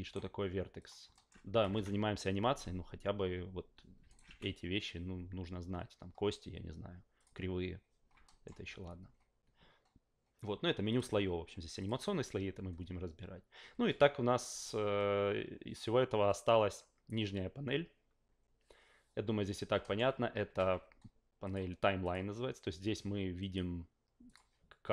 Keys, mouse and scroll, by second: 0.8 click, 1.1 alt+middle click, 1.6 F8, 1.7 F8, 4.1 alt+right drag, 4.3 f, 7.2 click, 8.2 alt+middle drag, 10.9 click, 11.8 click, 19.8 alt+middle click, 21.4 click, 22.0 click, 23.4 click, 24.2 click.